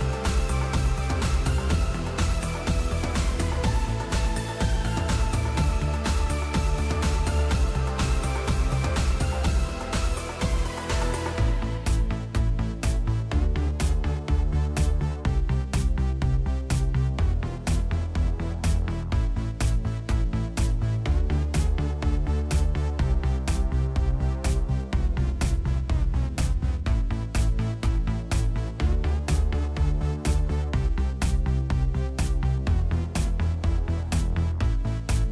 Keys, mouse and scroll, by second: 4.5 click, 6.9 click, 18.7 click, 20.3 click, 21.0 click, 26.0 click, 29.3 click.